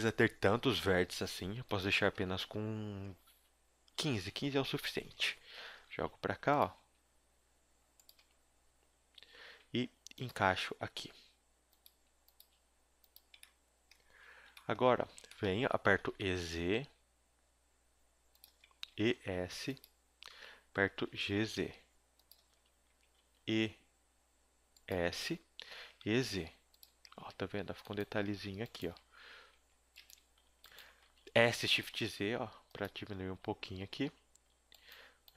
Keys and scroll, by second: 4.1 BackSpace, 5.7 g, 6.8 s, 8.4 KP_7, 9.3 z, 9.6 s, 10.4 g, 11.9 s, 12.4 g, 14.1 z, 16.0 e, 18.6 -, 18.9 e, 20.3 z, 20.9 g, 22.5 z, 22.9 e, 25.0 z, 25.8 e, 27.1 a, 28.3 a, 29.5 s, 30.0 Escape, 31.1 z, 31.4 s, 33.3 a, 34.0 z.